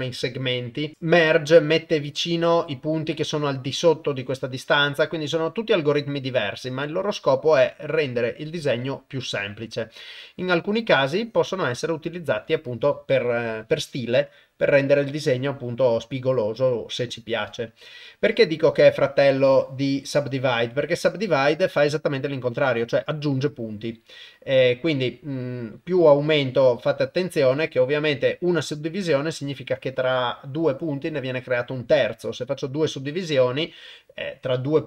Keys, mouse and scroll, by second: 0.9 click, 3.8-7.0 shift+drag, 8.2-8.9 drag, 10.5-12.2 shift+drag, 19.0-22.6 drag.